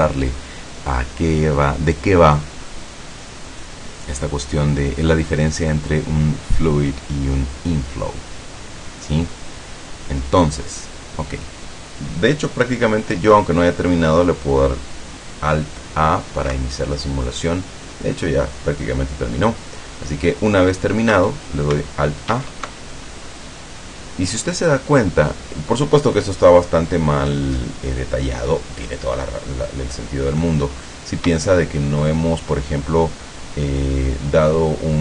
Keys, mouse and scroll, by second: 22.3 alt+a, 27.4-30.7 middle drag, 30.8-31.3 scroll up 2, 31.5-32.3 shift+middle drag.